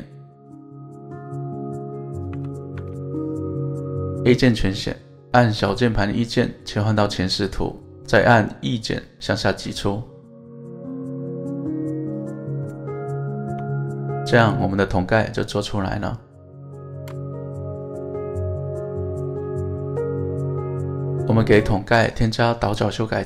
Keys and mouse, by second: 0.3-1.5 middle drag, 2.3 KP_7, 2.8 alt+z, 4.4 a, 5.6 KP_1, 6.5 shift+middle click, 7.9 e, 12.1 click, 12.7 middle click, 13.5 alt+z, 13.9 middle click, 15.6 middle click, 17.7 middle click, 18.7 middle click, 19.7 middle click, 21.6 Tab.